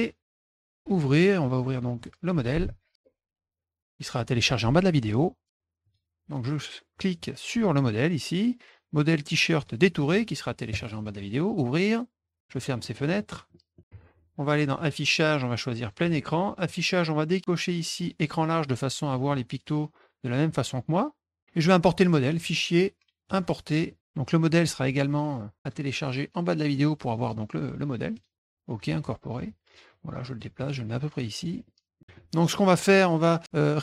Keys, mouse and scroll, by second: 0.8 click, 2.0 click, 5.8 click, 9.5 click, 10.7 click, 12.4 middle click, 12.5 middle click, 12.6 middle click, 12.8 middle click, 12.9 middle click, 13.3 middle click, 13.7 middle click, 14.7 click, 15.8 click, 16.6 click, 19.0 click, 20.4-21.4 middle drag, 22.3 click, 23.2 click, 24.6 click, 25.6 click, 28.1 click, 29.9 click, 30.6 middle click, 31.2 click, 31.6 middle click, 32.0 middle click, 32.4 middle click.